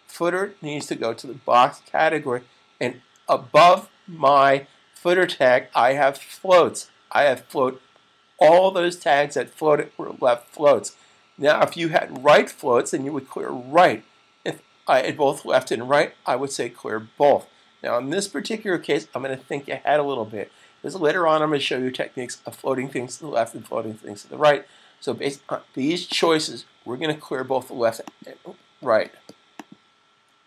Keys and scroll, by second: 30.0 super+s.